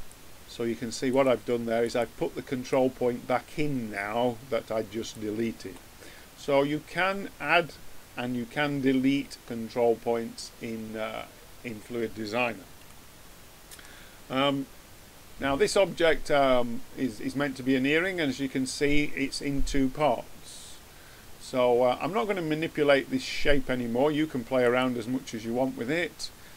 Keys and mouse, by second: 1.0-4.4 drag, 5.5-8.9 middle drag, 8.9-18.4 middle drag, 24.6-26.4 middle drag.